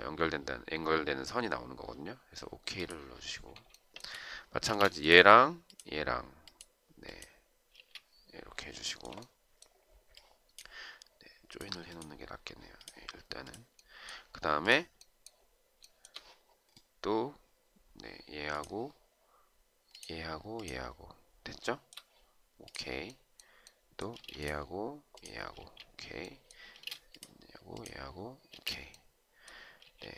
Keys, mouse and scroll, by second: 3.9 shift+right click, 4.8 space, 7.9 space, 9.0 shift+right click, 16.0 shift+right click, 21.8 shift+right click, 24.3 space, 25.8 space, 27.0 space, 28.7 space.